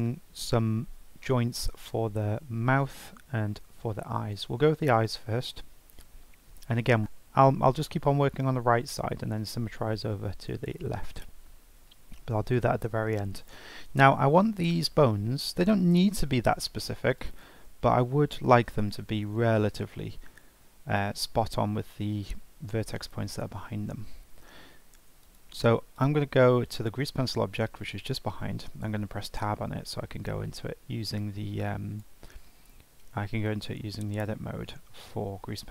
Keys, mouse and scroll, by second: 4.4-4.8 scroll up 2, 4.8-8.4 shift+middle drag, 8.4-8.8 scroll up 1, 8.8-11.8 shift+middle drag, 17.2 shift+right click, 19.2 shift+a, 21.6 ctrl+z, 25.2-26.8 drag, 28.8 Tab, 31.1-34.2 drag.